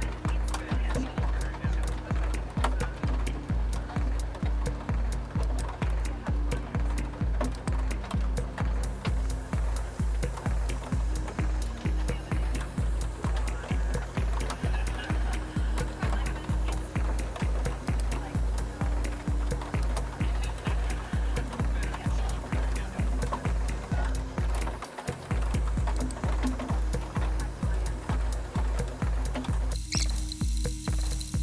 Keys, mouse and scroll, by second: 5.5 click, 7.6 click, 17.9 click, 19.8 click, 26.0 click.